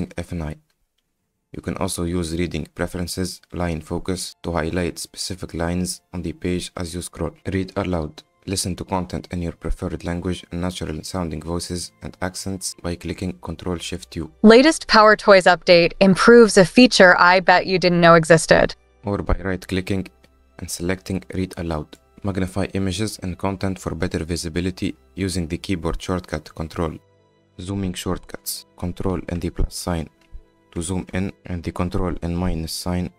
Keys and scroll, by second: 0.7 F9, 13.2 ctrl+shift+u, 27.5 F10.